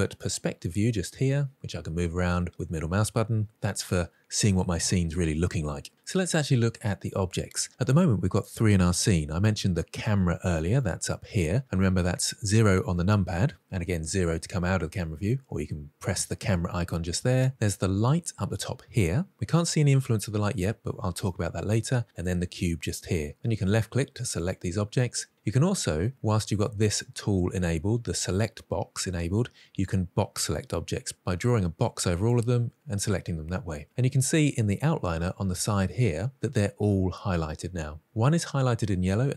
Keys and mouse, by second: 0.1-2.5 middle drag, 10.8 click, 11.6 KP_0, 13.7 KP_0, 17.9 click, 22.1 click, 23.7 click, 24.2 click, 24.6 click, 29.5-32.3 drag.